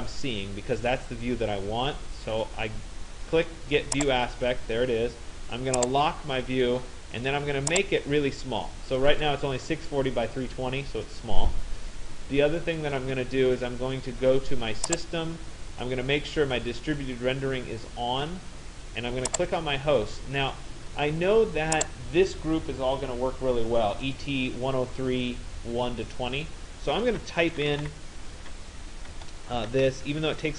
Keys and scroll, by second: 27.2 shift+e, 27.8 t, 29.7-30.5 typing.